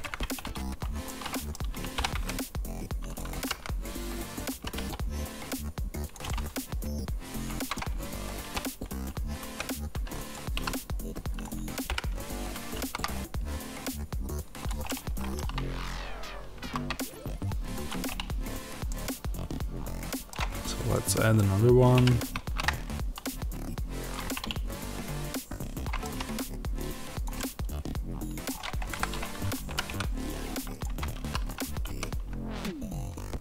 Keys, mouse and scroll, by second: 0.0 Tab, 0.9 middle click, 1.9 r, 3.1 click, 3.2 g, 4.2 click, 4.4 g, 6.0 click, 6.2-10.2 middle drag, 7.8 g, 10.2 click, 10.4 s, 11.3 click, 11.8 g, 14.5 click, 14.8-17.7 middle drag, 17.7 shift+a, 18.8 middle click, 21.8 g, 24.0 click, 24.1 middle click, 25.9 g, 27.1 click, 27.2 middle click, 28.8 KP_7, 29.6 g, 30.7 click, 30.8 Tab, 31.1 s.